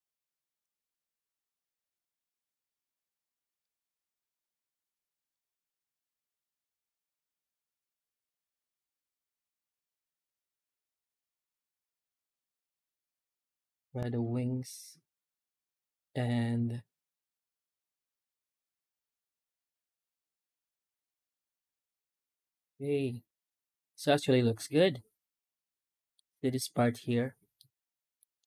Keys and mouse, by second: 3.5 alt+middle click, 3.8-4.8 middle drag, 5.2-6.2 middle drag, 6.7 F9, 22.0-26.0 middle drag, 27.4-28.0 middle drag, 28.3 shift+middle click.